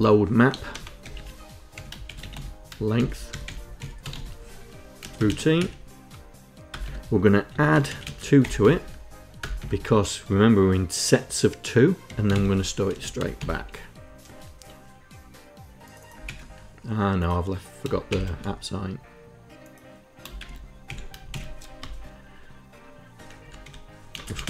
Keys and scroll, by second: 0.0-5.2 typing, 4.8 KP_Add, 6.4 Return, 6.5 Tab, 6.9-8.8 typing, 9.0 Return, 9.2 Tab, 11.5-13.0 typing, 15.9 ctrl+Insert, 17.7 shift+', 20.0 shift+', 20.5 Delete, 20.9 shift+Insert, 21.4 Return, 23.0 Up, 23.3 End, 23.7 space.